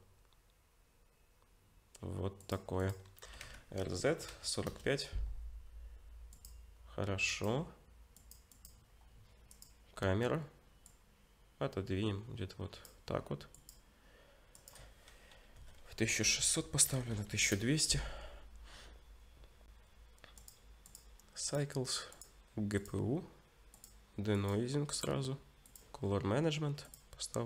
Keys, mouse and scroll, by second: 2.8 click, 3.2 r, 6.3 click, 7.3 click, 16.2 0, 17.1 0, 20.4 click, 20.9-26.0 click, 26.0-26.8 scroll down 1, 26.8 click, 26.8-27.4 scroll down 4.